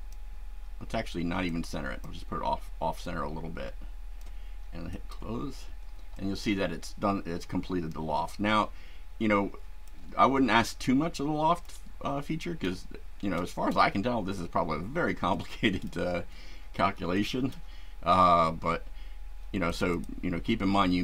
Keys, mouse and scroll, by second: 1.5-2.2 drag, 3.0-4.3 drag, 4.9 click, 6.1-10.0 shift+right drag, 10.6 shift+right click, 13.4-13.9 shift+right drag, 15.3-16.1 shift+right drag, 17.1 shift+right click, 19.6 click.